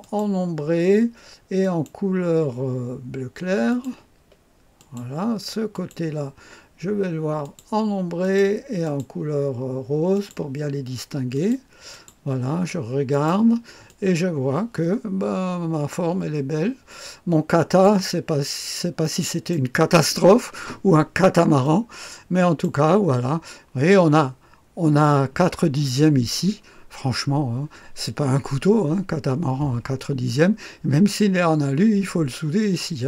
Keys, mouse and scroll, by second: 0.0 click, 1.5 click, 3.6 click, 4.7 click, 5.7 click, 7.3 click, 8.1 click, 8.8 click, 10.1 click, 11.3-12.6 drag, 13.0-14.4 drag, 15.7-17.8 drag, 18.4-19.2 scroll up 2, 19.0 middle click, 21.6-23.2 drag, 23.2-25.8 scroll up 1, 32.9-33.0 scroll down 1.